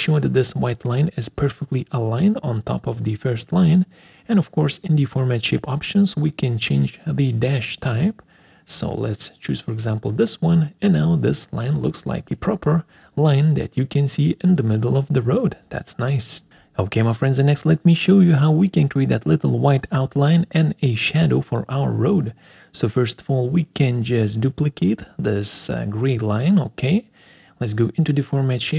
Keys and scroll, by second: 0.3 ctrl+alt+Left, 0.5 ctrl+alt+Down, 5.2 alt+4, 26.8 alt+4.